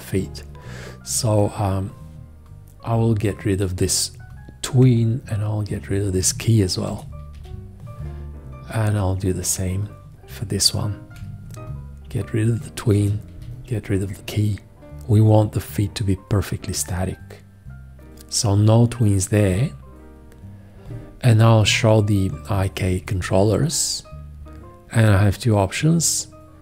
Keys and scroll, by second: 4.7 4, 6.9 shift+x, 11.1 4, 12.9 shift+x, 21.6 F1.